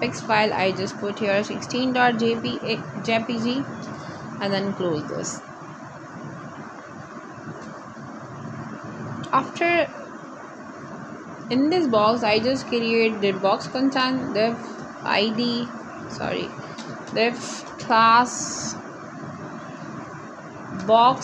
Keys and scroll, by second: 0.0-2.1 typing, 3.0 Return, 5.0-10.3 typing, 12.6-15.3 typing, 16.7 Right, 18.0 shift+., 18.6 Return, 19.8 Up.